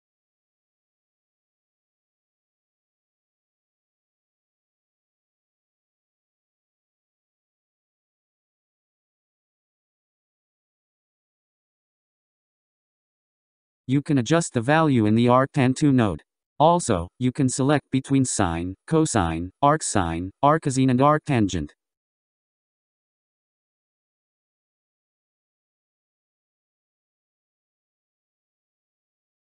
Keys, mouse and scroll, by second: 3.0 click, 11.9-12.5 scroll down 1, 12.9-15.0 scroll down 17, 15.0-16.9 scroll up 2, 16.9-18.3 scroll down 5, 18.3-20.4 middle drag, 20.4 KP_1, 21.5-24.5 middle drag, 25.8-26.4 scroll down 2, 26.4-27.0 scroll down 6, 27.0-29.4 middle drag.